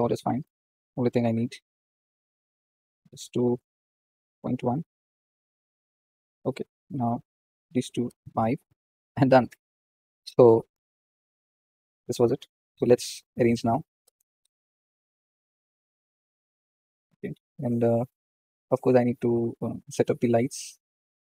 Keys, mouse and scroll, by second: 4.9 scroll down 2, 5.4-8.0 middle drag, 8.0-10.6 drag, 10.6-11.3 scroll down 3, 11.5-14.0 middle drag, 14.0 KP_0, 14.7-15.4 scroll down 4, 15.4 scroll up 1, 15.6-16.6 scroll down 3, 16.6-17.9 scroll up 1, 17.9-18.4 scroll up 1, 18.4 click.